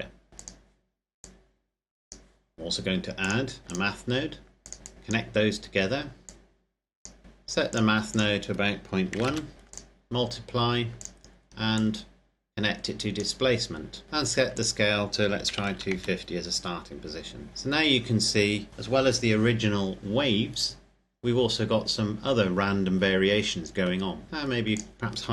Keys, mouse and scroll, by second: 1.5 click, 4.9 click, 7.1 click, 9.3 KP_Decimal, 9.5 KP_Enter, 10.5 click, 12.7 click, 14.0-14.5 scroll up 1, 14.7 click, 15.5 KP_2, 15.7 KP_5, 15.9 KP_0, 16.6 KP_Enter, 24.8 click.